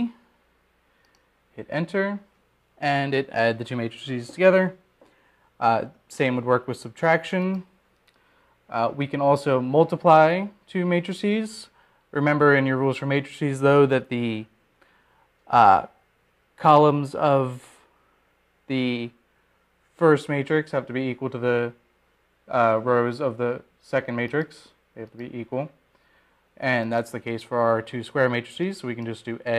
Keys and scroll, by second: 1.4 Down, 2.7 Return, 3.7 Return.